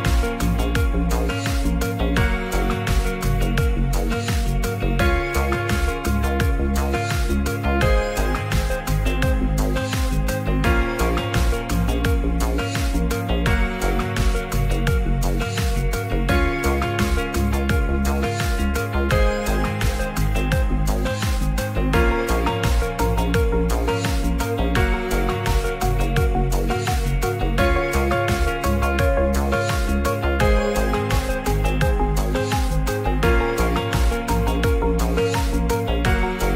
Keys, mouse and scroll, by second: 0.0 s, 3.6-4.0 drag, 4.0 scroll up 2, 4.1 middle drag, 4.3 scroll down 2, 4.7 ctrl+s, 5.8 shift+click, 6.3 s, 8.8 ctrl+a, 9.4 middle drag, 9.7 Tab, 10.2 Tab, 10.7 middle drag, 12.0 middle click, 14.0 shift+click, 14.6-15.2 right drag, 15.6 middle click, 16.0 Tab, 16.6 Tab, 17.7 click, 18.2 middle click, 19.2 middle click, 19.9 ctrl+r, 20.4 Tab, 20.8 ctrl+r, 24.3 click, 25.1 3, 25.3 click, 26.0 Tab, 26.9 Tab, 27.2 middle click, 27.8 middle click, 28.1 shift+click, 28.3 middle click, 28.8 shift+click, 29.1 middle click, 29.6 shift+d, 30.1 middle click, 30.4 s, 30.9 click, 31.2 scroll up 1, 31.3 middle click, 31.9 click, 33.8-36.1 right drag, 36.4 middle click.